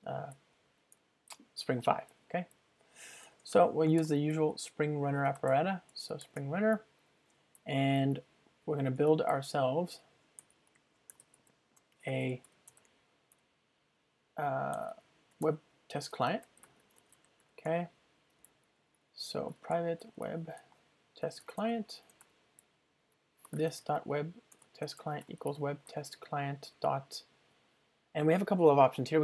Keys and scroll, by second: 3.7 Return, 5.9 Return, 11.8 Return, 17.3 Return, 21.6 Return, 21.7 ctrl+space, 24.5 Return.